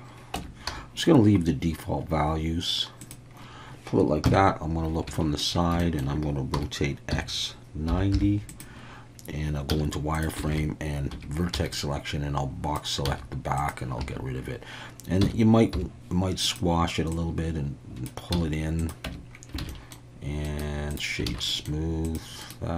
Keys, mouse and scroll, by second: 0.3 Tab, 0.7 s, 3.0 click, 4.2 KP_3, 5.2 shift+middle click, 5.8 shift+middle click, 6.5 r, 7.1 x, 7.9 9, 8.1 0, 8.5 click, 9.7 z, 10.5 alt+a, 11.1 1, 11.5 b, 13.0 x, 14.0 a, 15.2 s, 15.7 y, 16.4 click, 17.1 click, 18.3 z, 19.0 Tab, 19.6 alt+a, 19.7 middle drag, 20.5 right click, 21.4 alt+a, 21.5 middle drag, 22.5-22.7 right drag.